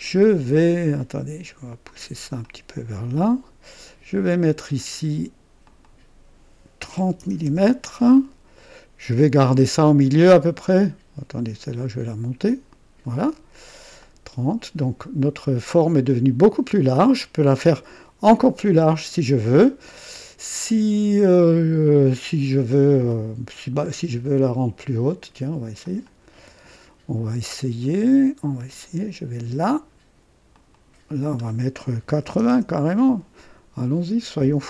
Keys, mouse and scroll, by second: 2.4-3.7 drag, 5.6 click, 7.0-7.4 typing, 7.4 KP_Enter, 11.3-13.2 drag, 14.0 click, 15.2-17.5 drag, 20.3-24.5 drag, 25.8 click, 28.8 click, 30.5 click, 32.0 KP_8, 32.2 KP_0, 32.5 KP_Enter.